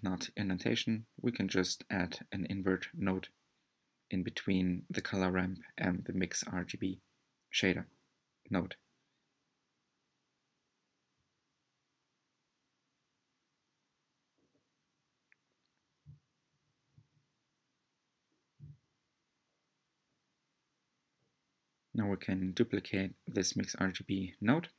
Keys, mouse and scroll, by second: 6.7-7.8 middle drag, 7.8-8.5 scroll up 2, 8.5 scroll up 1, 9.2-14.7 middle drag, 14.7 scroll down 2, 18.3 click, 20.2 shift+d, 24.5-24.7 scroll up 2.